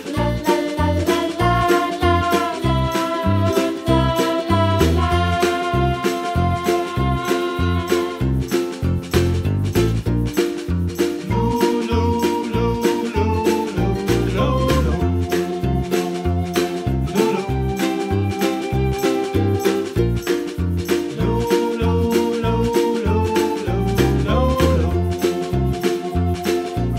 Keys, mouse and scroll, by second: 0.4 click, 1.1 middle click, 1.7 click, 2.2 3, 2.4 click, 2.6 middle click, 3.1 click, 4.4 g, 6.2 2, 6.6 click, 7.1 click, 7.6 alt+shift+click, 8.4 g, 9.4 click, 10.1 click, 10.6 3, 10.9 click, 11.6 alt+click, 12.1 click, 12.3 middle click, 12.9-13.5 scroll down 2, 13.5 alt+click, 14.2 alt+shift+click, 14.7 alt+shift+click, 15.2 alt+shift+click, 15.9 ctrl+z, 16.7 alt+shift+click, 17.3 e, 18.2 s, 19.6 middle click, 20.2 click, 20.5 middle click, 20.9 Tab, 21.1-21.8 middle drag, 21.8 scroll up 1, 22.0 scroll down 1, 22.4 s, 23.5-24.3 middle drag, 24.3-24.7 scroll down 6, 24.7 middle click, 25.1-25.6 scroll up 2, 25.6 Tab, 26.1 shift+right click, 26.5 shift+a.